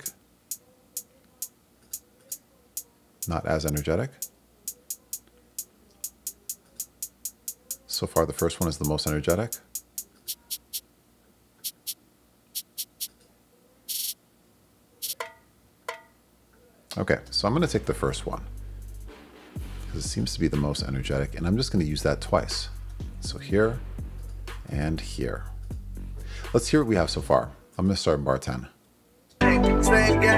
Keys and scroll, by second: 17.3 space, 21.0 super+c, 22.8 super+v, 24.6 super+v, 29.3 space.